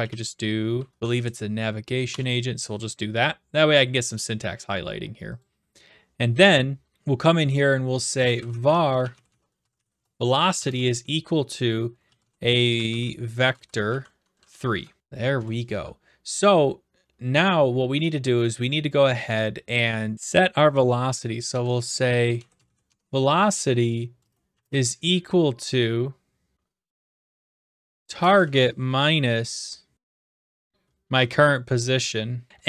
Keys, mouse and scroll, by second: 0.1-1.3 typing, 2.1 shift+Return, 5.4-6.5 drag, 6.9 Return, 8.0-10.5 typing, 11.8-14.4 typing, 14.7 Down, 15.7 Return, 21.5-23.1 typing, 24.5 typing, 26.3-27.0 typing, 27.9 Tab, 28.4 typing, 29.7-30.9 typing, 31.1 Tab, 32.5 BackSpace.